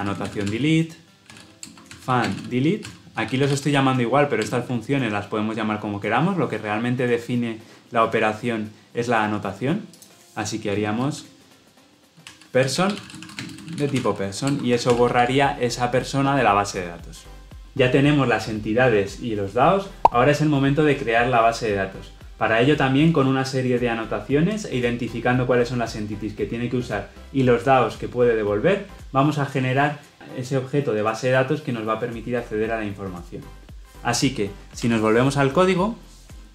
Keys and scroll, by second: 4.4 alt+Return, 14.4 Return, 14.8 ctrl+alt+l, 15.0 ctrl+alt+o.